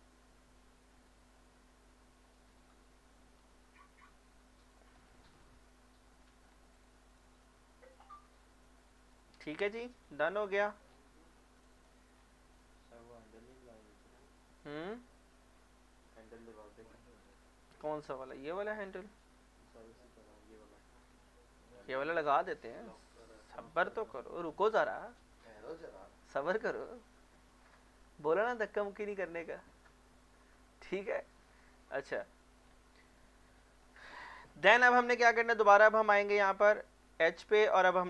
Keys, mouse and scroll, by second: 4.6 click, 4.9 scroll down 1, 5.2 middle click, 5.8 Tab, 6.5 scroll down 1, 6.7 click, 7.5 middle click, 8.4 scroll down 1, 8.8 middle click, 9.7 scroll down 1, 11.2 scroll up 1, 11.6 click, 12.2-13.5 scroll down 1, 13.5-16.0 middle drag, 16.0 middle click, 17.2-17.8 scroll down 1, 17.8 scroll up 1, 18.8 scroll down 1, 19.3 scroll up 1, 24.0 middle click, 25.5-26.5 scroll up 1, 26.5-29.8 middle drag, 29.8 middle click, 30.6 scroll up 1, 30.9 middle click, 31.9 scroll up 1, 32.2 middle click, 32.6 scroll down 1, 33.0 middle click, 33.6-33.9 scroll down 1, 33.9 middle click, 35.4 Tab, 37.4 middle click.